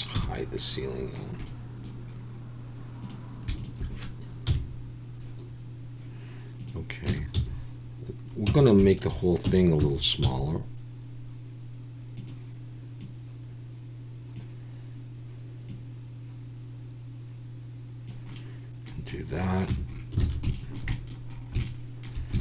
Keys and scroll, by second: 0.1 h, 4.5 KP_1, 7.1 Tab, 7.3 a, 8.5 Tab, 9.4 Tab, 9.8 a, 10.2 s, 19.7 Tab, 20.3 alt+a.